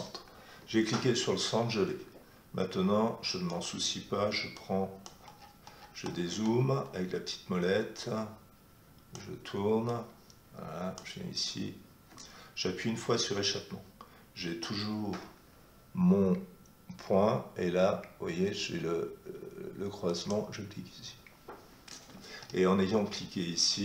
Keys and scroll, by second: 13.2 Escape.